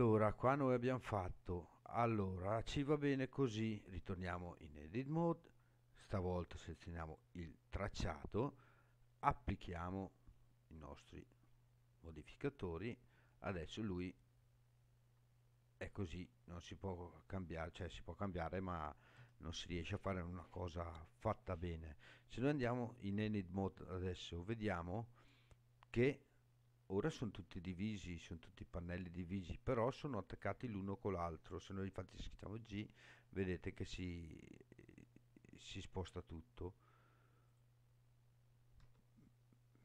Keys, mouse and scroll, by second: 1.6 shift+middle click, 4.2 Tab, 7.0 click, 9.2 click, 10.8 click, 12.6 scroll down 2, 13.3 scroll down 2, 13.9-17.4 middle drag, 19.1 KP_7, 20.5 scroll up 3, 22.9 Tab, 23.8 scroll up 3, 24.5-25.7 scroll down 3, 30.3 click, 32.1 g, 36.0 right click, 37.5 click, 38.8 g.